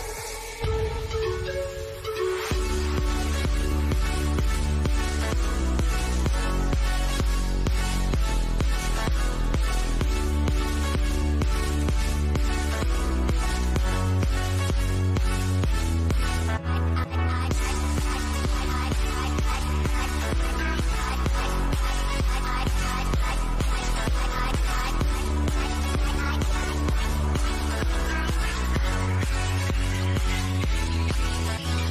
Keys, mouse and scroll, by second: 5.4-11.0 drag, 11.9 scroll down 1, 12.8 click, 16.2 scroll down 1, 17.2 shift+middle click, 18.1-18.5 scroll up 1, 22.3 click, 24.8 scroll down 1, 25.3 shift+middle click, 26.5 scroll up 1, 27.3-30.6 drag.